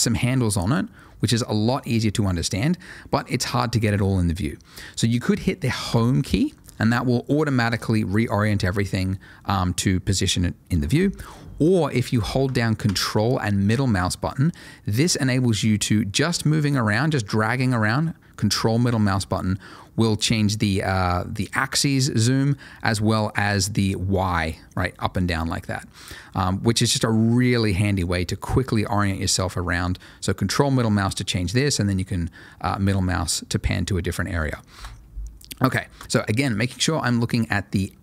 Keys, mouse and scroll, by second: 0.4 middle click, 5.9 Home, 13.6 ctrl+middle click, 15.9-18.9 ctrl+middle drag, 31.7 ctrl+middle click, 32.9 middle click, 34.7 Home, 36.0 click.